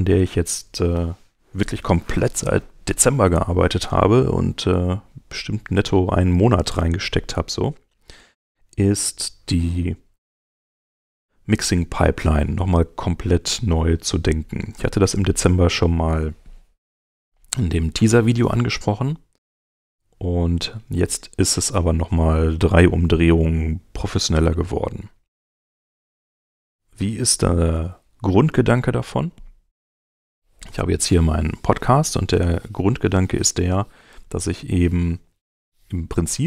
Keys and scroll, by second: 11.0 super+Tab.